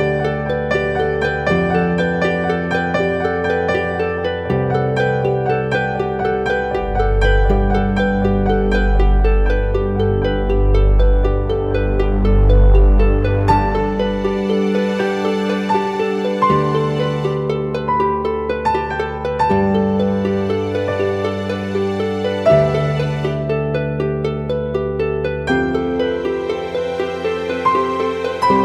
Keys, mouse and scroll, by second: 3.3 double click.